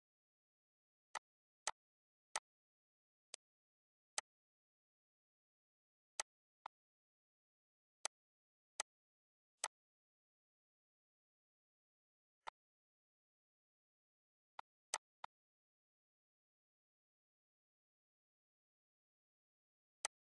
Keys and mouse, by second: 1.1 click, 1.6 click, 2.3 click, 3.3 click, 4.2 click, 6.1 click, 6.6 click, 8.1 click, 8.8 click, 9.6 click, 11.0 click, 12.3 click, 14.6 click, 17.5 ctrl+s, 20.0 click.